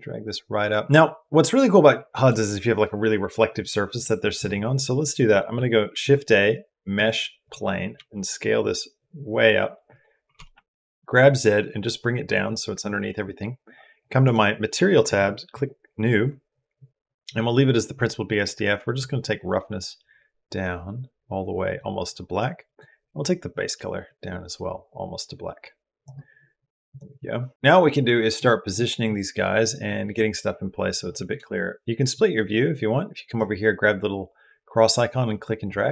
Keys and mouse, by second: 0.8-4.2 middle drag, 5.7 shift+a, 7.8 s, 10.2 g, 14.9 click, 18.8-21.6 drag, 22.5 click, 31.9-33.1 drag.